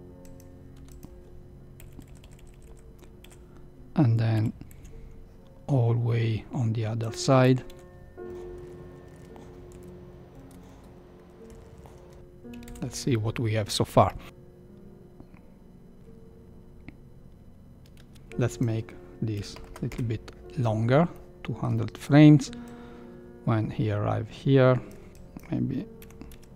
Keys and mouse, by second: 0.7 i, 1.8 Right, 1.9 Right, 2.1 Right, 2.2 Right, 2.4 Right, 2.6 Right, 3.2 Right, 4.3 r, 7.6 i, 8.5-9.1 Right, 9.6 r, 10.4 i, 11.4-12.0 Right, 12.6 shift+Left, 17.9 space, 18.7-20.4 drag, 19.6 KP_0, 21.3 middle click, 22.6-25.1 drag, 25.1 a, 25.1 b, 26.0 g.